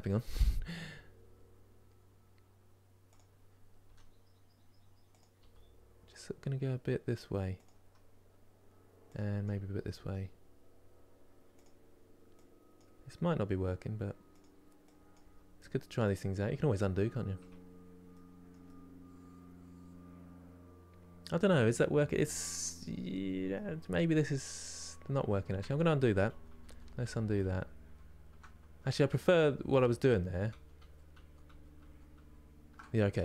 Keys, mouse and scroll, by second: 0.0 click, 0.5 g, 9.1 click, 9.5 g, 12.4 click, 12.7 g, 14.8 click, 14.9 g, 17.4-18.0 scroll down 2, 18.3-21.8 middle drag, 22.5-25.5 middle drag, 25.5-26.7 ctrl+z, 28.8 ctrl+shift+z, 29.0-31.2 ctrl+shift+z.